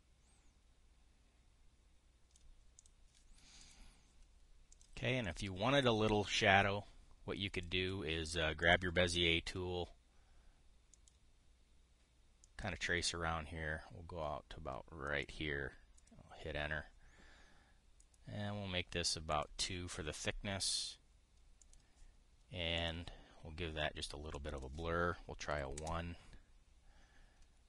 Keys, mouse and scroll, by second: 0.5-3.1 drag, 3.4 click, 4.3 click, 5.4 click, 18.7 click, 20.0 click, 22.3 click, 23.5 click, 25.0 click, 26.2 KP_1, 26.5 Return.